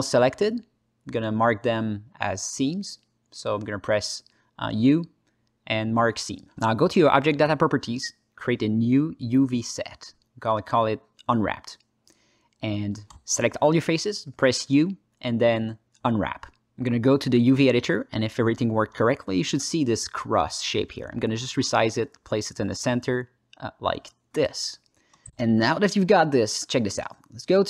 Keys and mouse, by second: 1.8 alt+click, 3.1 ctrl+shift+click, 3.7 ctrl+alt+click, 3.9 ctrl+alt+middle click, 4.4 u, 9.0-10.9 drag, 10.5 p, 11.7 ctrl+middle click, 11.8 ctrl+alt+click, 11.9 ctrl+alt+middle click, 12.3 3, 12.6 alt+z, 13.0 click, 14.5 u, 16.6 click, 18.9 ctrl+space, 19.2 ctrl+middle click, 19.6 alt+shift+middle click, 20.1 click, 20.7 ctrl+alt+middle click, 21.1 s, 21.7 click, 21.9 g, 23.1 click, 23.3 s, 24.4 click, 25.1 drag, 25.5 Tab, 26.0 ctrl+alt+middle click, 26.6 z.